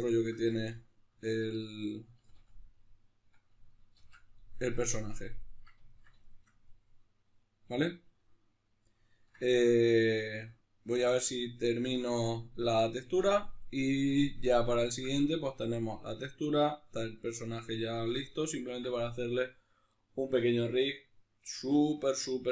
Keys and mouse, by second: 0.5 z, 0.9 ctrl+middle click, 1.9 a, 2.3 middle click, 3.7 shift+c, 4.3 middle click, 5.7-22.5 ctrl+middle drag.